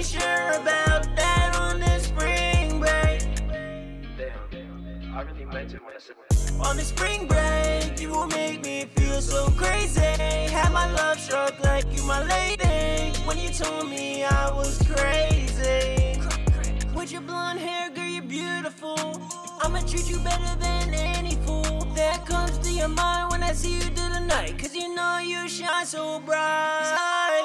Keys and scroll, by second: 4.8-5.5 typing.